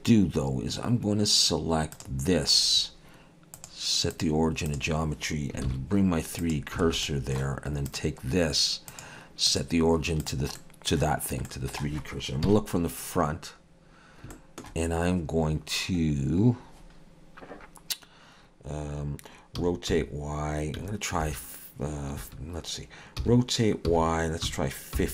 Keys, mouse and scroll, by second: 1.9 click, 3.6 click, 5.7 shift+s, 6.9 alt+a, 7.1 middle click, 7.9 click, 8.9 click, 10.6 middle click, 11.5 middle click, 12.5 KP_1, 13.7-14.3 scroll up 1, 14.3 shift+middle click, 19.6 r, 23.2 r.